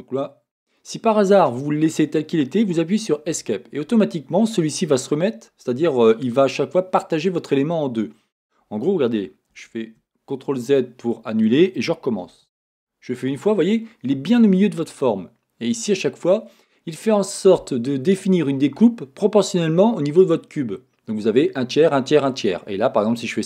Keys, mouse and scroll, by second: 3.4 Escape, 9.2-23.4 super+middle drag, 9.5 z, 12.3 ctrl+r.